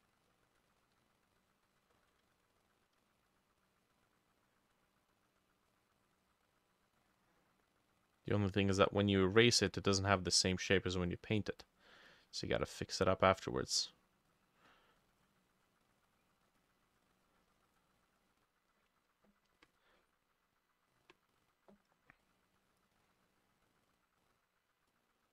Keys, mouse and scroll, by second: 1.7 double click, 2.3 ctrl+z, 2.5 shift+click, 3.6 double click, 5.8 double click, 6.1 double click, 6.6 double click, 9.8 double click, 12.1 double click, 13.1 double click, 16.1-20.2 drag.